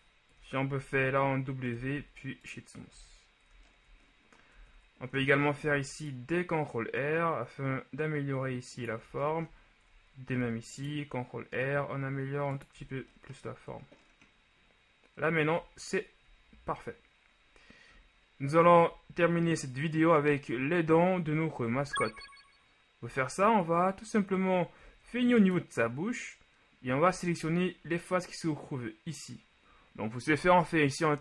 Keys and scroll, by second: 0.4 KP_1, 1.9 w, 3.0 a, 3.6 ctrl+a, 4.6 Tab, 5.2 ctrl+Tab, 5.7 ctrl+r, 10.5 ctrl+shift+r, 12.9 Tab, 21.8 ctrl+s.